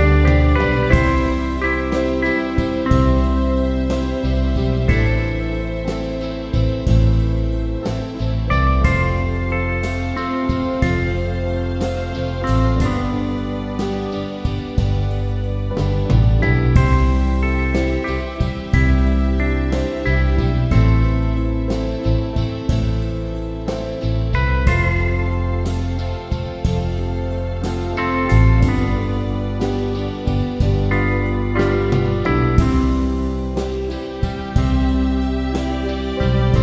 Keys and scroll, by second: 0.4-1.4 typing, 16.1 [, 27.3 ], 35.3-36.6 typing.